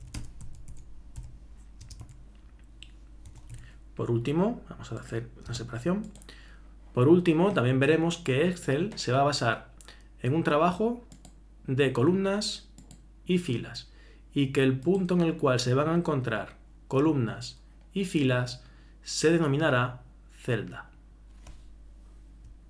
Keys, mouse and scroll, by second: 0.0-0.4 typing.